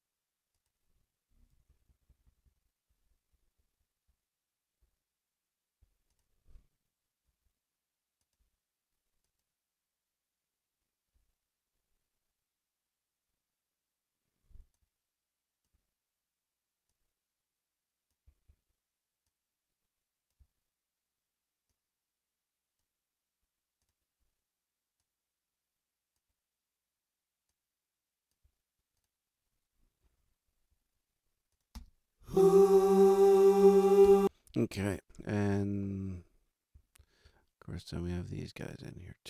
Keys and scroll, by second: 1.5 t, 7.2 a, 8.3 a, 30.0 r, 31.7 space, 34.0 space.